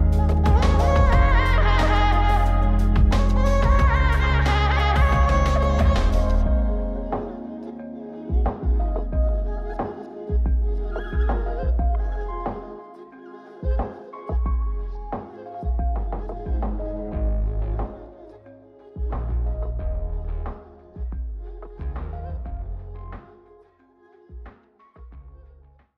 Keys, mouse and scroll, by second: 2.3-4.2 drag, 5.3-6.8 drag, 13.6-15.0 drag, 17.6-18.6 drag, 19.6-21.0 drag, 24.6-25.1 scroll down 3, 25.1-25.6 scroll up 3.